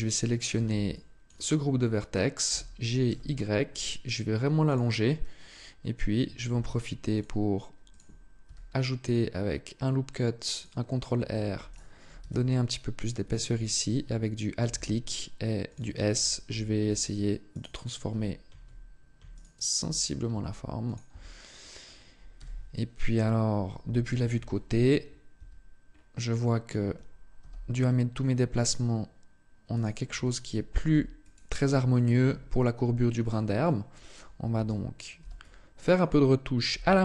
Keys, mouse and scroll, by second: 0.3 b, 2.3 g, 4.5 click, 6.4 ctrl+r, 7.7 click, 8.3 s, 10.4 click, 11.5 alt+right click, 12.0 s, 12.8 click, 13.5 alt+right click, 14.5 s, 15.6 click, 17.3 alt+right click, 19.1 alt+right click, 20.1 s, 20.7 click, 20.9 Tab, 22.1 z, 23.5 z, 24.1 KP_3, 25.1 Tab, 25.7 scroll up 2, 26.3 scroll up 1, 27.2 g, 29.6 click, 29.9 a, 30.6 b, 32.1 g, 33.1 click, 33.4 shift+middle click, 34.3 a, 35.0 b, 36.5 g.